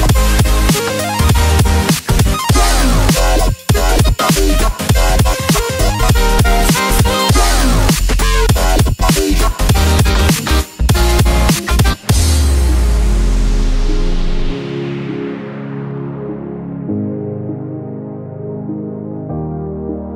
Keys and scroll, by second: 15.3 ctrl+t, 17.6 ctrl+t.